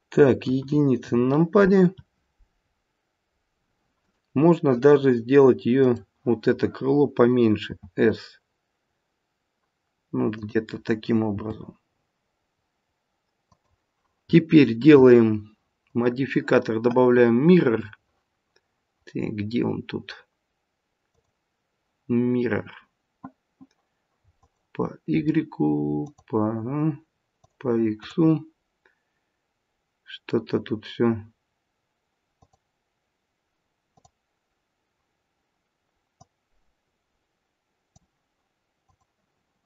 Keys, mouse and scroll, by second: 0.3 KP_1, 3.9 click, 5.8 click, 7.6 s, 11.3 g, 15.9 click, 24.4 click, 26.0 click, 27.4 click, 28.0 click, 32.3 click, 33.9 click, 38.9 click.